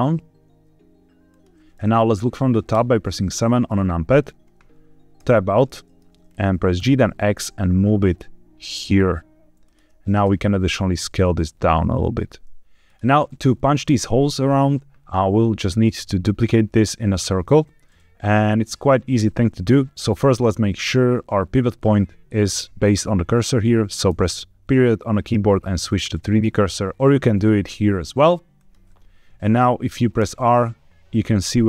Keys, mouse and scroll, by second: 1.2 click, 2.7 KP_7, 5.1 Tab, 5.6-5.9 shift+middle drag, 6.2-6.7 scroll up 1, 6.7 g, 6.9 x, 9.6 shift+click, 10.2 s, 12.8 click, 27.3-28.5 drag, 30.1 r, 31.5 Escape.